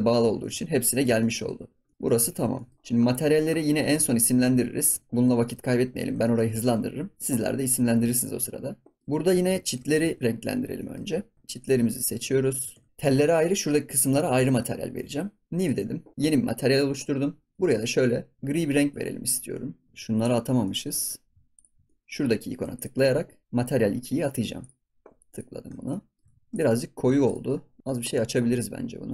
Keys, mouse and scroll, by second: 0.4 ctrl+s, 0.6 scroll down 2, 0.9-1.4 shift+middle drag, 1.4 ctrl+s, 1.6 scroll up 4, 1.8 shift+middle click, 2.2 ctrl+s, 2.5 shift+middle drag, 2.8 ctrl+s, 2.9-4.7 scroll up 10, 4.7 ctrl+s, 5.2 scroll down 1, 5.3-5.9 shift+middle drag, 5.9 ctrl+s, 6.2-6.5 shift+middle drag, 6.5 ctrl+s, 6.8-9.0 scroll up 2, 9.0 middle click, 9.1 scroll up 1, 9.3 ctrl+s, 9.6 shift+middle click, 9.9-10.4 scroll up 2, 10.0 ctrl+s, 10.2 click, 10.4 scroll down 3, 10.7 shift+middle click, 11.5 shift+click, 12.4 shift+click, 12.8 ctrl+s, 14.4 ctrl+s, 14.6-15.0 middle drag, 15.0 ctrl+s, 15.5-16.5 drag, 16.8-17.5 scroll down 1, 17.5 click, 19.9 scroll up 2, 20.2 click, 20.4 scroll down 1, 20.6 middle click, 21.0 scroll up 2, 21.5 shift+click, 21.8 middle click, 22.7-23.9 drag, 25.3 click, 25.5 scroll down 3, 25.7 ctrl+s, 25.9 middle click, 26.2 ctrl+s, 26.3 scroll up 1, 26.4 middle click, 26.5 click, 26.8 scroll down 1, 27.1 ctrl+s, 27.2-28.7 drag, 28.7 scroll up 2, 29.0 scroll down 1.